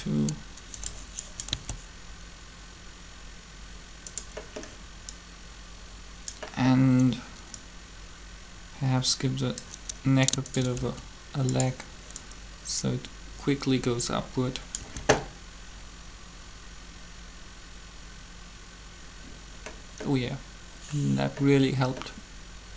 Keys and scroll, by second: 1.5 alt+a, 10.8 shift+r, 14.8 alt+a.